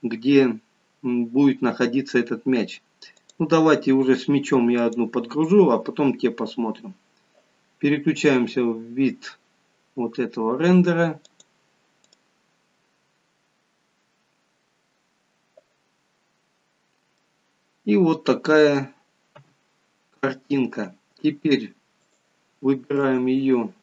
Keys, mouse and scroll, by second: 16.0 click, 16.0-16.9 scroll down 3, 16.9-17.3 scroll down 2, 17.3 middle click, 19.5 KP_1, 22.3 click.